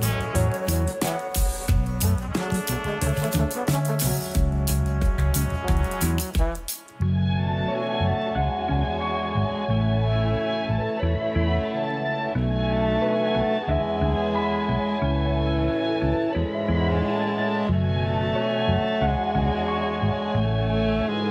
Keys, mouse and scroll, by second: 3.8 click, 4.5 click, 6.6 click, 7.8-11.7 drag.